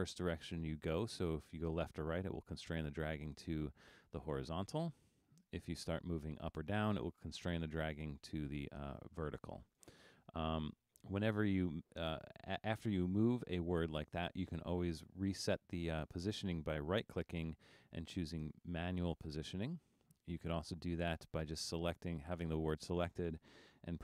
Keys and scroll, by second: 5.2 super+z, 10.7 super+z.